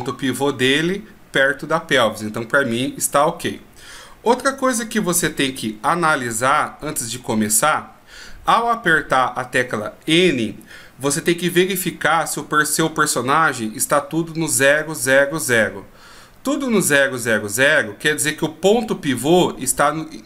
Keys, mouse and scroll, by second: 5.4 n, 6.9-8.6 scroll up 11, 8.6 scroll up 3.